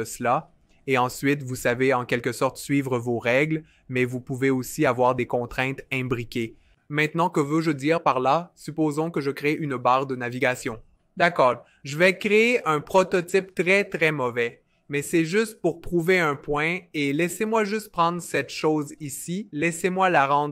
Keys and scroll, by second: 9.9 f, 12.9 r.